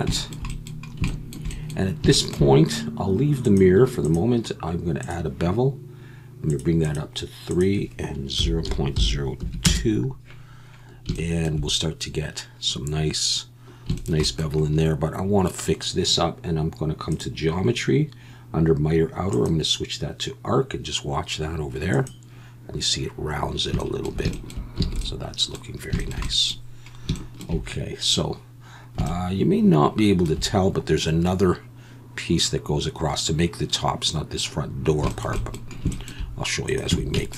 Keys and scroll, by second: 24.8 alt+a, 36.9 Tab.